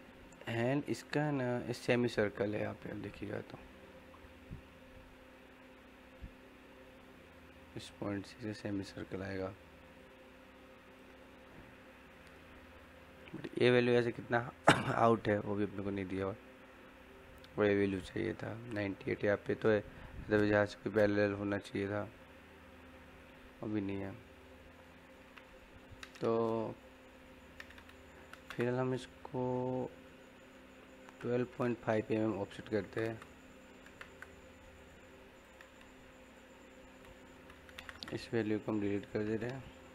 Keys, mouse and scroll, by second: 0.2 typing, 10.1-13.4 drag, 10.1 typing, 24.0 middle click, 28.1 o, 28.4 space, 34.8 click, 37.0-37.9 typing, 38.2 click, 39.8 scroll down 1.